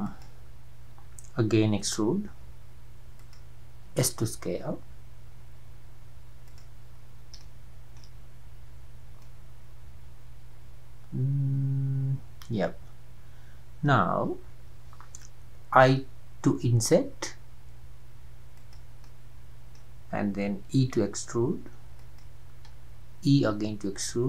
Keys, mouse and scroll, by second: 1.7 e, 3.9 s, 7.4 shift+middle click, 8.2-8.5 scroll up 4, 9.3-12.3 middle drag, 15.5 i, 19.1-20.8 middle drag, 20.8 e, 23.3 e.